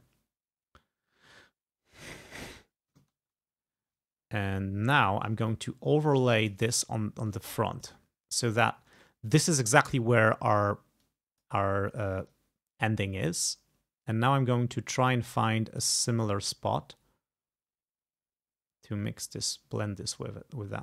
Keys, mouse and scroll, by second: 3.1 ctrl+scroll up 2, 5.1 ctrl+scroll down 2, 5.5-6.7 ctrl+drag, 6.8 ctrl+scroll up 2, 7.4 ctrl+click, 8.2 ctrl+scroll up 2, 8.6 ctrl+click, 11.1 click, 12.3-20.8 ctrl+drag.